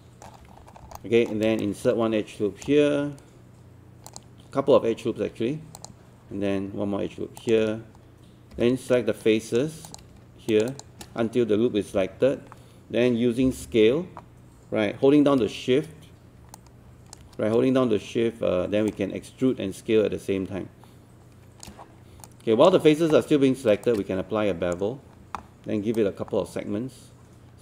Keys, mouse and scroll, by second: 0.4-0.8 scroll up 1, 1.0 alt+middle click, 1.6 shift+right click, 4.1 ctrl+click, 5.8 ctrl+click, 7.4 ctrl+click, 8.5 ctrl+w, 8.9 right click, 9.9 click, 10.5 shift+click, 11.9 shift+e, 13.5 r, 16.6 alt+click, 18.9-21.7 shift+drag, 22.3-23.7 alt+drag, 23.9-25.7 shift+right drag, 26.0-27.6 drag.